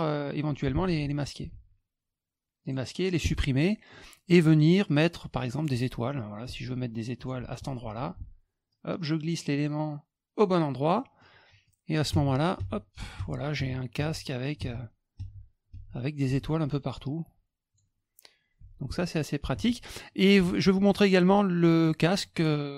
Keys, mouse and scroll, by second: 0.8 F2, 1.5 F1, 2.6 click, 3.6 middle click, 5.5 click, 6.5 ctrl+shift+click, 7.8 F1, 8.7-10.3 drag, 10.9 middle drag, 11.6-17.7 drag, 18.6 F1, 19.5 alt+Tab, 20.9 alt+click.